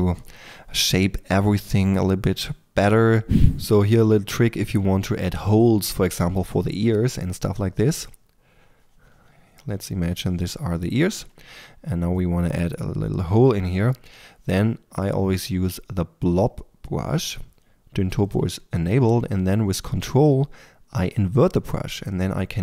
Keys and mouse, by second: 0.0-2.8 typing, 7.8 f, 11.0-19.1 drag, 19.1 f, 21.2-22.6 drag.